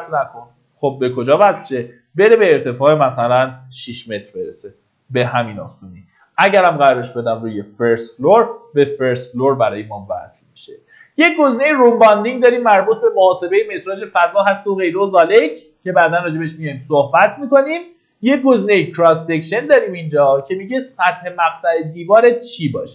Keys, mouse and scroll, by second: 3.3 KP_6, 6.4 click.